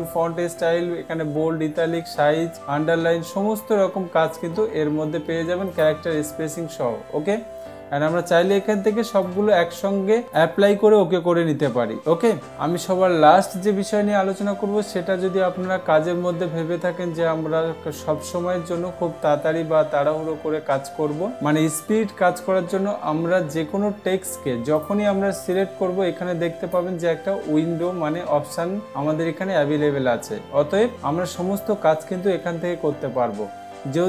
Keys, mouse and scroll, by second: 6.2 click, 9.8 click, 25.3 click.